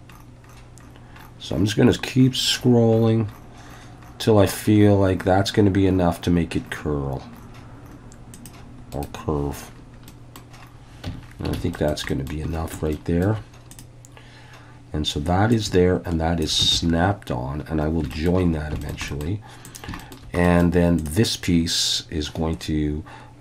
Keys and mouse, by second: 8.9 right click, 10.1 middle click, 11.1 Tab, 11.6 alt+a, 11.7 middle click, 12.1 middle click, 12.9 shift+middle click, 15.5 ctrl+click, 16.8 alt+a, 18.1 shift+middle click, 18.8 shift+middle click, 19.1 middle click, 19.7 drag, 20.0 shift+middle click, 20.5 middle click, 21.0-23.4 drag.